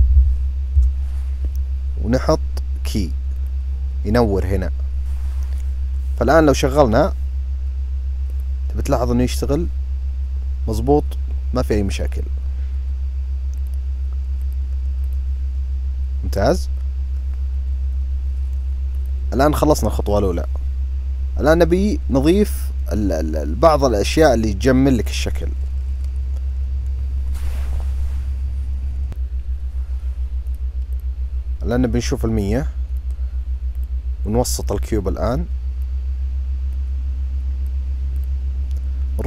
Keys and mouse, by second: 0.1 KP_0, 3.4 click, 6.6 drag, 8.3 click, 13.6 click, 14.5 click, 19.0 click, 30.1 click, 30.6 click, 31.8-32.7 drag, 33.4 click, 34.4 click, 36.5-37.4 drag, 37.9-39.1 drag.